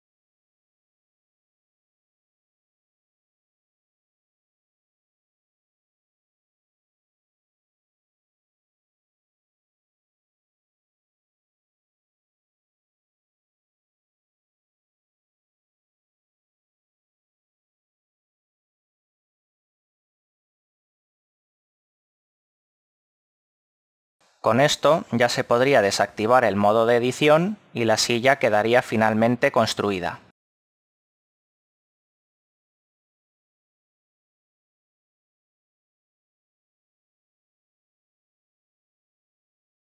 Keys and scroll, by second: 0.9 KP_5, 2.6 KP_1, 5.2 KP_3, 6.6 ctrl+KP_1, 8.8 typing, 27.7 KP_5, 31.2 Tab.